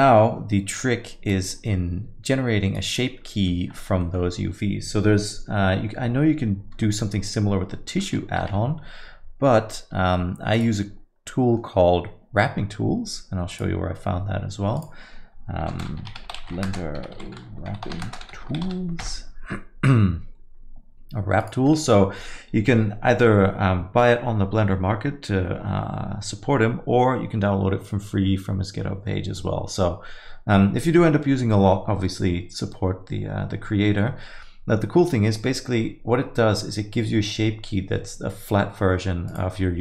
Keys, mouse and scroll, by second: 1.3 click, 2.7 click, 3.3 middle click, 3.5 scroll down 1, 3.7 alt+middle click, 4.0 middle click, 7.0 middle click, 7.9 middle click, 8.4 n, 10.5 click, 11.3 middle click.